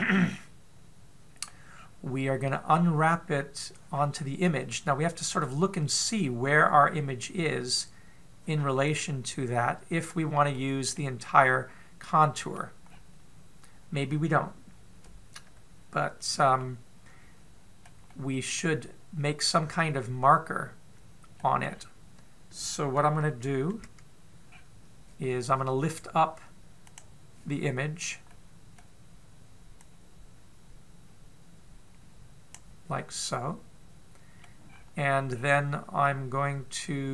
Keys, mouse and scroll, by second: 2.6 scroll down 2, 5.5 middle click, 11.7 middle click, 13.7-14.9 scroll down 2, 14.9 scroll down 1, 17.4 middle click, 18.9 middle click, 22.5-24.5 scroll up 5, 24.5 KP_7, 25.3-25.8 scroll down 3, 27.6 click, 29.1 middle click, 30.7 click, 33.8 middle click, 35.5-36.1 scroll up 5, 36.1-36.9 scroll down 1, 36.9 scroll down 1.